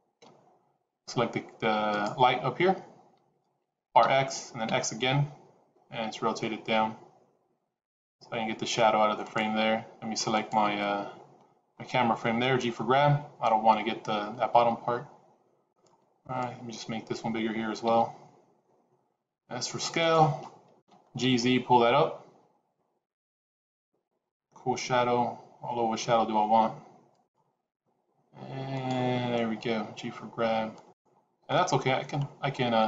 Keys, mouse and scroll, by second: 2.0 click, 3.6 r, 10.4 click, 11.7-12.4 scroll up 2, 12.5 g, 16.3 click, 17.8 s, 20.7 g, 27.6 scroll down 1, 28.8 click, 29.7 g, 31.8-32.3 scroll up 1, 32.3-32.7 scroll down 1.